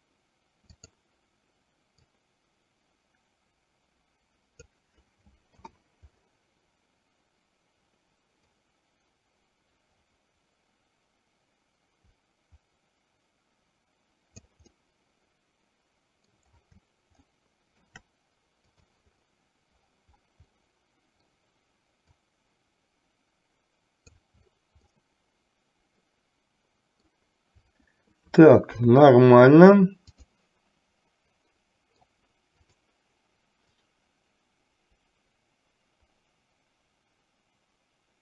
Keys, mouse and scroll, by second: 0.8 click, 2.2-4.8 drag, 5.7 KP_7, 8.5-14.6 drag, 15.0-16.6 middle drag, 17.5 shift+middle click, 18.8 click, 20.7 middle click, 22.5-24.3 drag, 25.1-27.3 middle drag, 28.8 KP_3, 31.6 middle click, 34.1-38.2 drag.